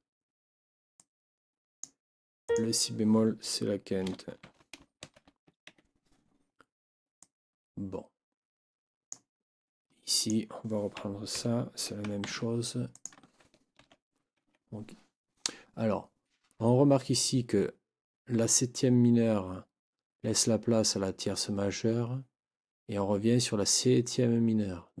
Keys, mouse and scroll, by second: 0.9-2.0 drag, 2.5 click, 4.4 ctrl+t, 5.0 ctrl+shift+9, 5.7 Escape, 7.2-9.3 drag, 10.1 click, 11.3 shift+Down, 12.3 ctrl+shift+c, 12.9 click, 13.8 ctrl+v, 14.3 ctrl+Escape.